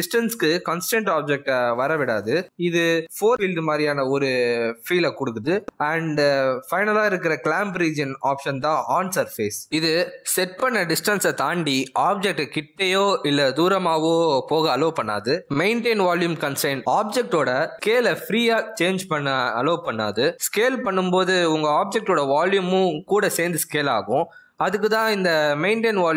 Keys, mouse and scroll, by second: 5.9 middle click, 7.9 click, 9.4 g, 10.7 g, 12.7 middle click, 13.0 g, 15.7 click, 17.4 s, 21.3 s, 23.2 s.